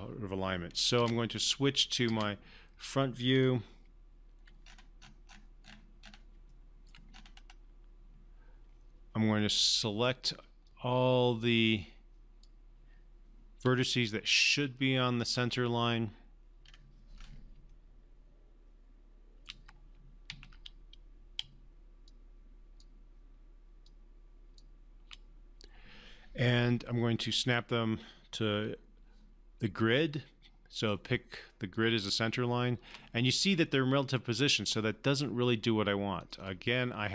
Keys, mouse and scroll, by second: 1.1 space, 2.2 space, 3.3-3.8 scroll down 2, 4.6-5.1 scroll up 2, 5.1 scroll down 2, 5.2-6.3 scroll up 2, 6.5-7.1 alt+middle click, 7.1-8.3 scroll up 1, 9.4-10.3 alt+middle drag, 10.7-12.5 drag, 14.9 shift+click, 16.6 shift+scroll up 1, 18.0-19.5 shift+middle click, 20.3 ctrl+z, 22.1-23.0 shift+drag, 31.0-33.0 typing, 31.7 click, 36.2 click.